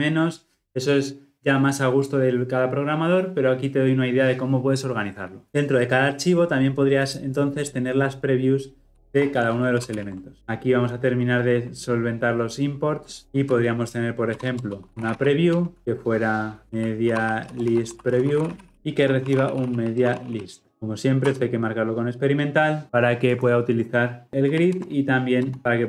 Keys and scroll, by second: 9.8 ctrl+alt+l, 20.7 alt+Return, 24.7 alt+Return.